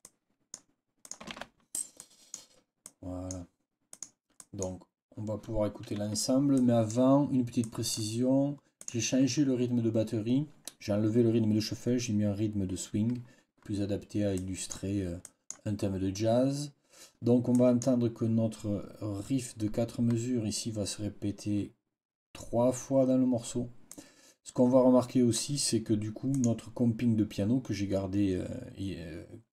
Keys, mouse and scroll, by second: 0.1 click, 0.3 click, 1.3 ctrl+v, 2.0 click, 2.2-3.4 scroll up 2, 3.8-4.7 scroll up 2, 6.4 click, 7.5 click, 8.7 click, 14.2 click, 15.1 click, 17.4 click, 23.8-25.4 drag, 26.2 click.